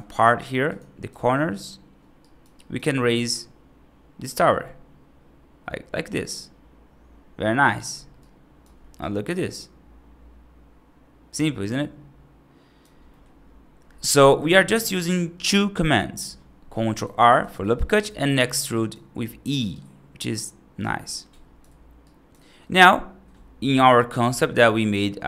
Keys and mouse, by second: 2.1 right click, 2.4 right click, 2.8 e, 8.0 right click, 8.8-12.7 right drag, 12.9 middle click, 16.8 right click, 17.3 ctrl+r, 18.6 right click, 19.6-20.7 right drag, 20.9 right click, 21.9 right click.